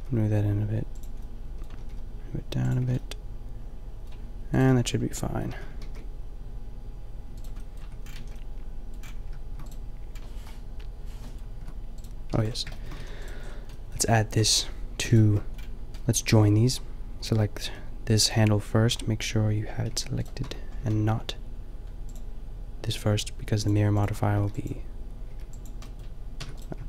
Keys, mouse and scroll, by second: 0.9-1.3 drag, 1.7 g, 2.8 a, 4.5 right click, 4.7 Tab, 5.5 a, 5.9 ctrl+r, 7.8 Tab, 8.2 a, 9.7-11.4 middle drag, 10.7 Delete, 11.7 Tab, 12.4 Tab, 13.0 a, 16.5-17.7 middle drag, 17.7 g, 18.1-18.9 drag, 19.9 click, 19.9 g, 20.3-23.3 drag, 20.5 Tab, 20.9 a, 24.4 b, 25.3 b, 25.8-26.8 drag, 26.5 Tab.